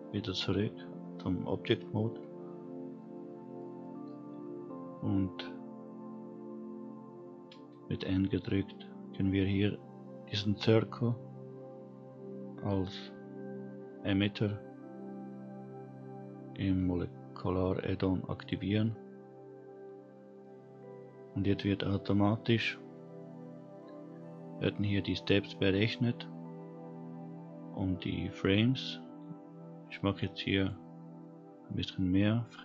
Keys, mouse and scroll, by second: 2.5-2.9 scroll down 2, 2.9-3.5 middle drag, 3.8 middle drag, 4.1-5.5 scroll up 1, 8.2 n, 18.3 click, 30.5-32.6 drag.